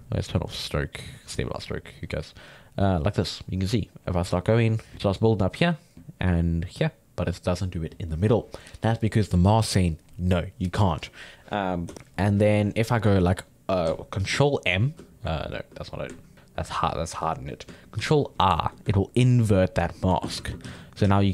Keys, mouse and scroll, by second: 4.9-8.6 ctrl+middle drag, 11.9 m, 14.2 ctrl+m, 14.8 middle click, 14.9 ctrl+z, 16.3-18.0 ctrl+middle drag, 18.0 ctrl+i, 18.3-20.2 ctrl+middle drag, 20.2 shift+space, 20.6 f, 21.0 f.